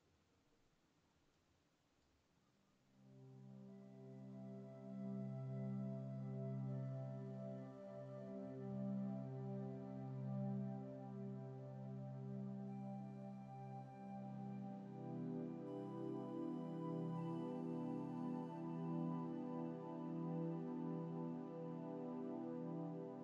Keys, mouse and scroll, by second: 1.5 middle click, 2.4 scroll down 1.